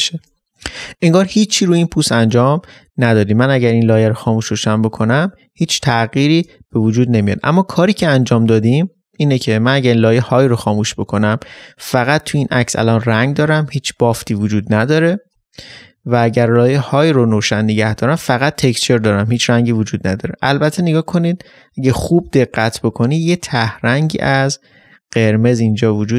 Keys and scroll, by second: 10.6 ctrl+space, 20.4 ctrl++, 25.5 ctrl++.